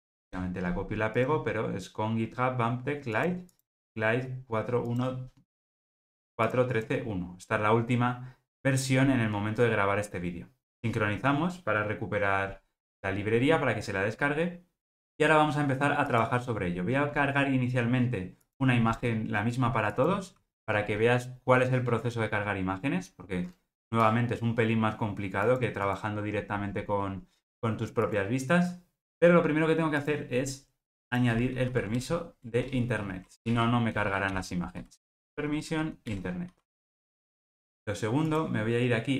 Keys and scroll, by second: 35.4 Return.